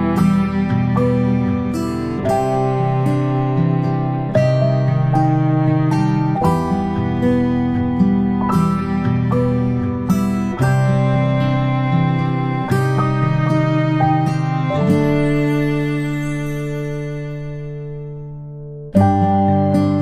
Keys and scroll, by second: 14.7 ctrl+shift+g.